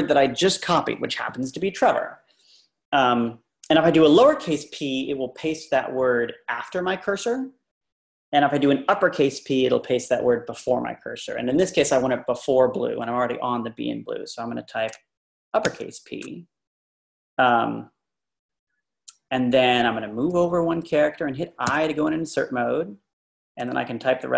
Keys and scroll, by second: 15.7 shift+p, 20.4 Tab, 21.6 i, 23.6 \.